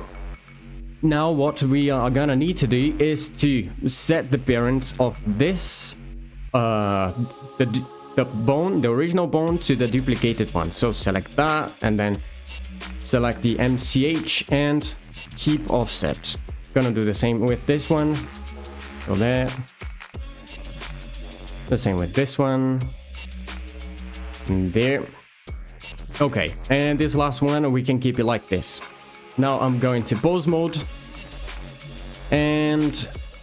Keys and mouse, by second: 0.8 shift+middle click, 4.8 click, 10.9 click, 14.1 d, 15.9 shift+middle click, 16.7 click, 17.5 alt+shift+click, 19.6 d, 23.6 d, 27.0 click, 28.3 shift+middle click, 28.9 Tab.